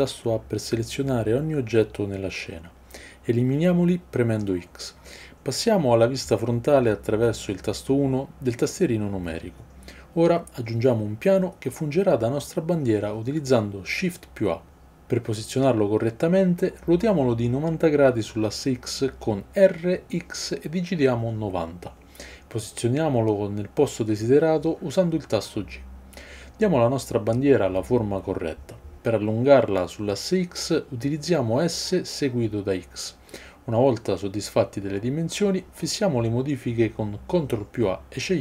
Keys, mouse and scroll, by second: 4.1 x, 6.0 KP_1, 15.1 shift+a, 18.0 r, 26.2 g, 29.5-30.3 shift+drag, 30.3-31.3 middle drag, 31.3-34.6 drag, 31.3 s, 34.6-38.4 middle drag, 34.6 g, 36.8 ctrl+a.